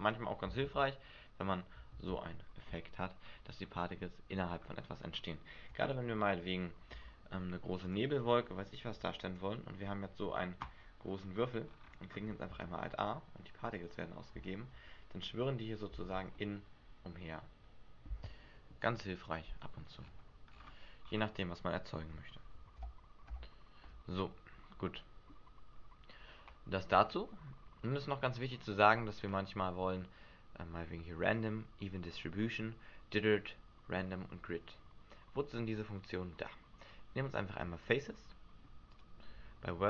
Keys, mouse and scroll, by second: 0.6 alt+a, 1.9 alt+a, 3.5-4.2 scroll up 5, 4.2 scroll down 1, 5.3 scroll down 5, 6.9 s, 7.9 click, 8.9 click, 11.0-11.7 scroll down 5, 11.7 scroll down 3, 12.5 alt+a, 16.0 alt+a, 16.3 middle click, 19.8-20.5 scroll down 2, 20.5-21.0 scroll down 8, 21.0 scroll up 4, 22.1 scroll up 1, 23.2 ctrl+z, 23.3 ctrl+z, 24.7 middle click, 25.4-26.3 scroll up 3, 37.8 click, 38.9 click.